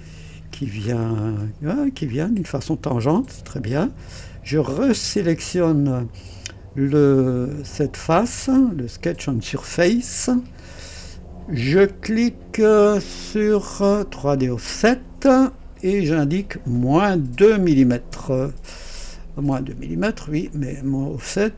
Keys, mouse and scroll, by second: 0.8 scroll up 1, 1.4 right click, 2.1-4.2 drag, 7.5 click, 13.2 click, 14.4 click, 16.1 click, 17.3 -, 17.7 KP_2, 18.1 Return, 20.4 click.